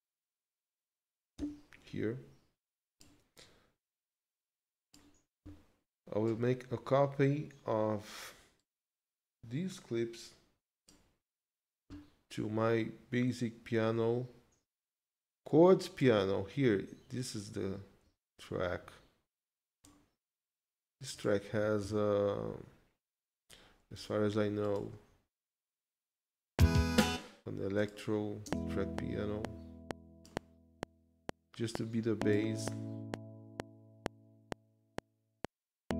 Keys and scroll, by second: 1.4 m, 26.5 space, 28.5 space.